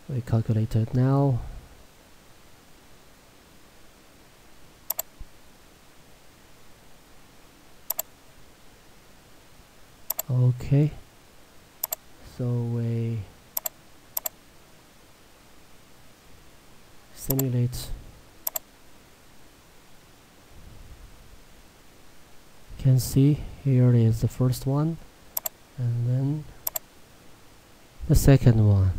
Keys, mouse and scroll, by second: 4.9 click, 8.0 click, 15.3 scroll up 1, 17.4 click, 21.6 middle click, 25.4 click, 28.5 middle click.